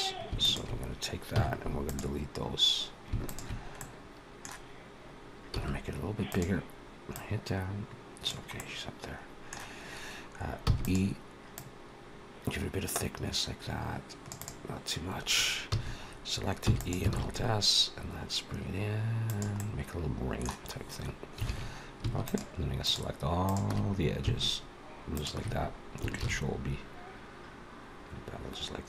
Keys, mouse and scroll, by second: 0.2 alt+shift+click, 1.2 x, 3.1 alt+shift+click, 3.6 middle click, 5.4 s, 7.0 click, 8.4 middle click, 10.5 e, 11.4 click, 14.2 click, 15.6 a, 16.5 e, 17.0 alt+s, 19.4 middle click, 20.6-21.2 scroll up 2, 21.3 alt+a, 22.1 alt+shift+click, 22.5 alt+shift+click, 23.2 alt+shift+click, 25.3 alt+shift+click, 26.1 ctrl+b.